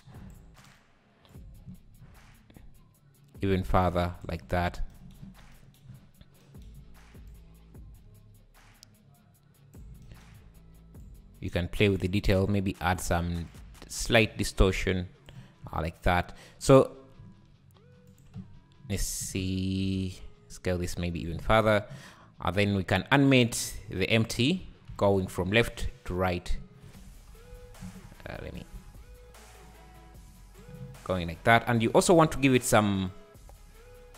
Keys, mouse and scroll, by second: 1.3-4.3 drag, 5.4 scroll down 1, 5.9-6.4 scroll up 4, 7.3-10.0 drag, 11.0-15.6 drag, 15.6 `, 16.7 click, 17.2 s, 18.3 x, 19.2 s, 23.2 shift+right click, 24.2 click, 24.9 g, 26.2 shift+right click, 26.7 scroll down 3, 26.8 `, 27.5 h, 27.8 x, 28.7 alt+h, 29.7 click, 31.5 `, 33.1 click.